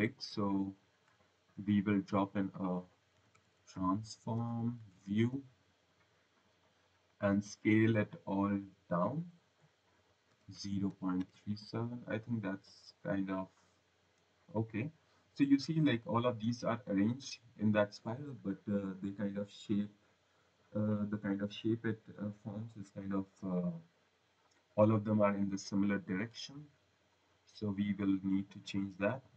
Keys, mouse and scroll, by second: 1.4 click, 2.0 click, 3.1-5.8 typing, 7.0 click, 8.2-8.5 scroll, 9.1 click, 10.8 3, 11.1 7, 12.6 click, 19.2 click, 26.3 click, 27.6 click, 28.2 scroll.